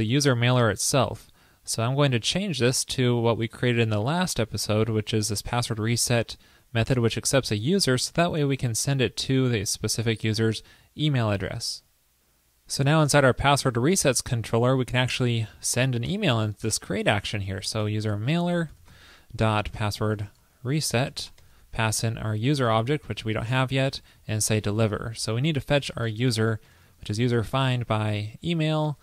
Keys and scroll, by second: 4.2 super+v, 11.6 super+s.